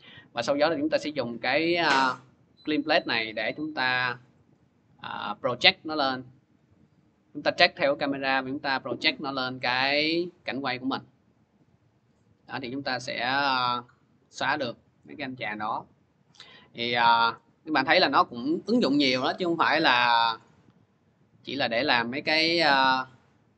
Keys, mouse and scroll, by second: 0.7 click, 4.1 click, 4.3 click, 5.1 click, 5.3 click, 6.0 middle click, 6.2-7.8 scroll, 7.8 click, 17.3 click, 19.1 click, 19.8 click, 21.1 click, 23.4 click.